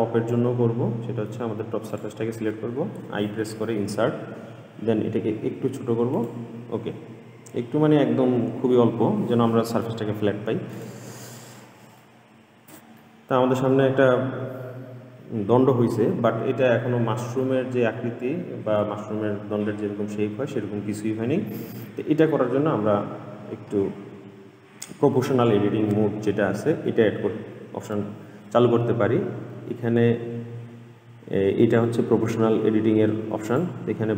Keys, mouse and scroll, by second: 2.1 click, 7.0-8.6 scroll up 5, 8.6-10.0 scroll up 1, 10.0-10.9 scroll down 4, 10.9 click, 11.5 middle click, 12.4-13.3 scroll down 1, 13.3-16.2 middle drag, 17.6-20.7 shift+middle drag, 33.6-34.1 drag.